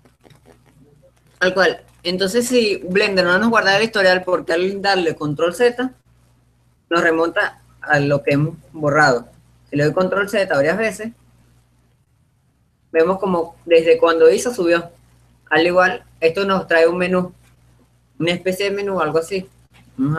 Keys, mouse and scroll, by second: 0.0 click, 1.4-4.6 middle drag, 6.4 ctrl+z, 7.6-8.8 middle drag, 10.0 ctrl+z, 10.9 ctrl+z, 13.0 middle click, 13.8-14.9 scroll up 1, 15.6 scroll up 1, 15.9 middle click.